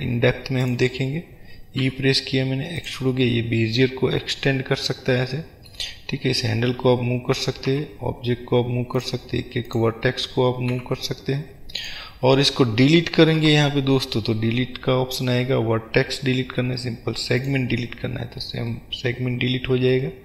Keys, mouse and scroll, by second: 0.7 click, 1.9 e, 3.0 click, 3.3-9.1 middle drag, 9.1 click, 9.8 click, 10.9 g, 12.0 click, 12.5-13.2 scroll down 2, 13.2 middle click, 13.2-13.5 scroll down 1, 13.5 Delete, 18.8-20.2 middle drag.